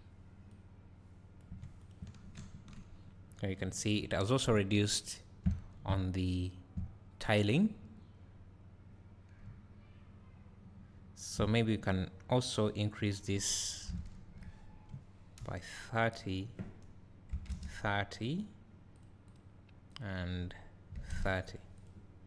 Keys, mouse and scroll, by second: 3.6 Delete, 4.8 `, 5.7-6.4 scroll up 2, 7.2-7.7 scroll down 2, 9.5 `, 11.0 `, 15.7 click, 15.7 KP_0, 19.0 click, 19.3 click, 21.8 click.